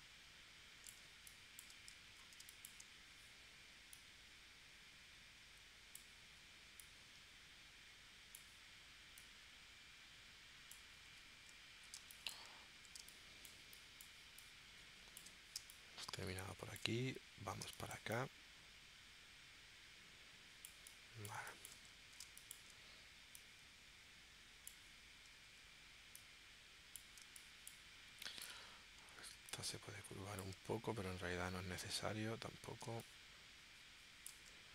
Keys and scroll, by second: 1.0 space, 2.4 space, 11.9 space, 13.0 space, 15.6 space, 17.6 space, 22.3 space, 27.2 space, 32.9 space.